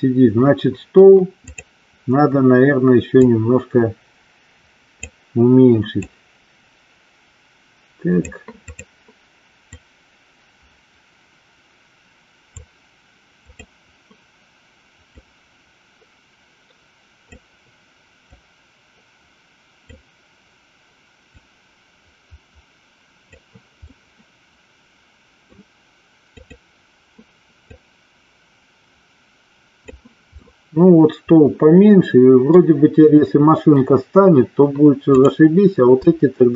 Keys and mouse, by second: 1.6 click, 3.4-5.1 drag, 6.1-8.4 drag, 8.9 click, 9.9-12.8 drag, 13.6 click, 15.3-17.6 drag, 18.5-20.1 drag, 21.4-23.6 drag, 24.1-25.8 middle drag, 26.5 click, 27.8-30.0 drag, 30.6-32.8 middle drag, 35.3 click.